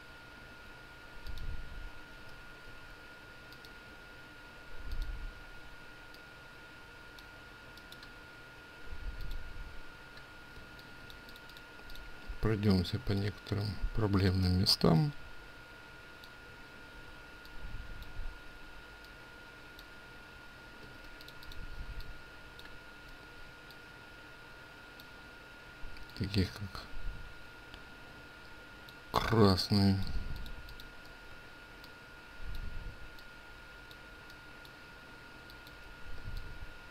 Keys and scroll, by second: 2.7 ctrl+z.